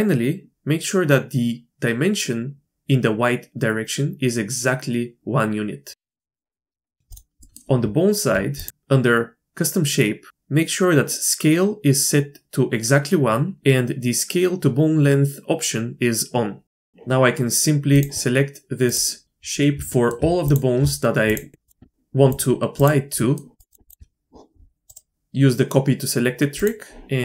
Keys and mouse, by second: 6.4 shift+middle click, 6.8 shift+middle click, 7.4 click, 7.8 Tab, 8.6 click, 16.7 shift+drag, 16.8 click, 19.9 shift+drag, 22.3-23.3 shift+drag, 23.6 shift+click, 24.9-26.6 drag.